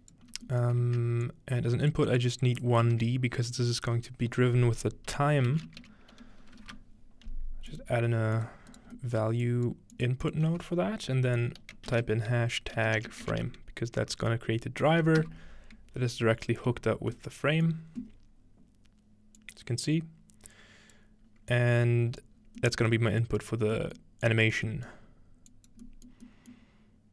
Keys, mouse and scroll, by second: 0.0 click, 0.3 scroll up 2, 1.0-1.8 scroll up 1, 1.3 shift+click, 1.8 scroll up 1, 2.2 click, 3.0 shift+a, 3.6 click, 4.1-5.5 shift+drag, 5.5 typing, 6.6 Return, 7.3-7.7 scroll up 1, 7.7-9.8 drag, 8.7 right click, 10.0 click, 10.3 click, 11.9-13.8 typing, 15.2 Return, 16.6-17.1 scroll up 2, 17.1-19.4 middle drag, 19.4-21.0 drag, 21.5 click, 22.4-24.0 scroll down 3, 24.0 scroll up 1, 24.3 click, 24.3 middle click, 24.6 scroll down 1, 24.9 middle click, 25.0 scroll up 1, 25.5 click, 26.1 middle click, 26.6-27.0 scroll up 1.